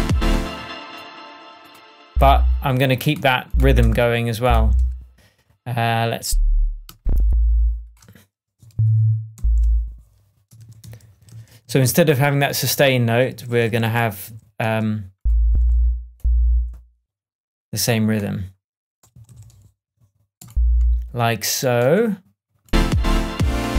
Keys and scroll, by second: 0.3 space, 3.7 BackSpace, 8.6 alt+shift+Up, 9.3 shift+Down, 10.5 shift+super+z, 13.2 shift+super+z, 15.4 shift+super+Up, 19.0 alt+Left.